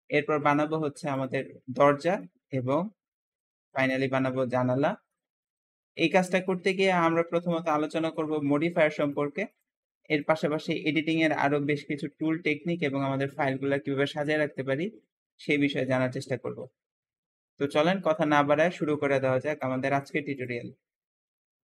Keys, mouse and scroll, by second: 1.0 click, 1.5-1.9 scroll up 2, 1.9-3.6 shift+middle drag, 3.6 shift+click, 4.2-5.3 shift+middle drag, 5.3-6.3 scroll down 2, 6.3-8.9 middle drag, 8.9 shift+click, 9.4 shift+click, 9.9 click, 11.0 middle click, 12.8 click, 13.8 click, 14.2-21.8 shift+middle drag.